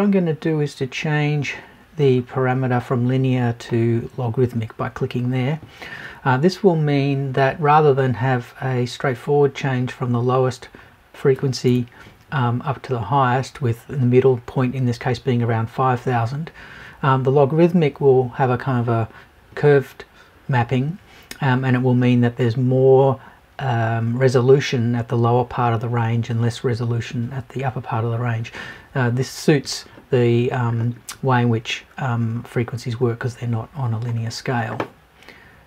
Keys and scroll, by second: 11.6 BackSpace.